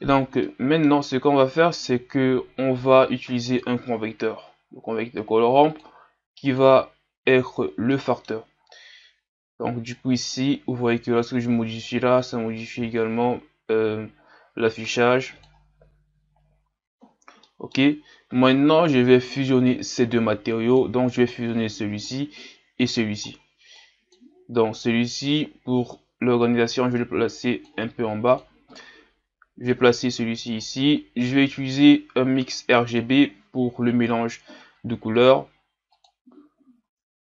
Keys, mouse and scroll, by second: 6.6-36.1 drag.